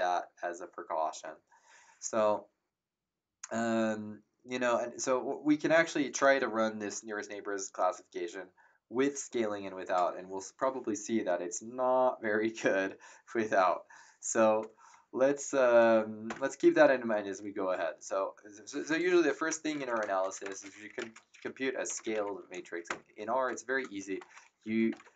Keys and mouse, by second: 16.2 Return, 16.2 KP_Enter, 18.9-22.8 typing, 24.1-25.1 typing.